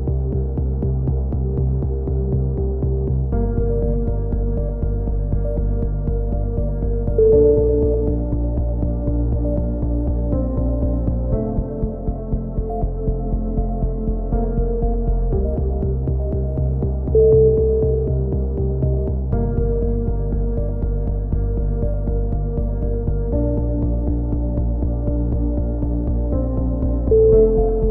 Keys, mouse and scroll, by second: 0.2-2.2 middle drag, 2.2 right click, 2.5-3.6 drag, 4.2 right click, 4.9 f, 5.1 a, 5.6 ctrl+KP_1, 8.7 middle click, 9.0 click, 10.1 middle click, 11.4 KP_3, 11.7 z, 12.9 z, 14.1-15.6 middle drag, 15.6-16.7 right drag, 16.7 ctrl+KP_1, 17.4 click, 18.2 ctrl+z, 18.8-20.4 drag, 20.5 a, 21.4 middle click, 22.1 Tab, 23.8-24.8 drag, 24.8 middle click, 25.8 click, 27.1 Tab, 27.3 middle click, 27.6 click.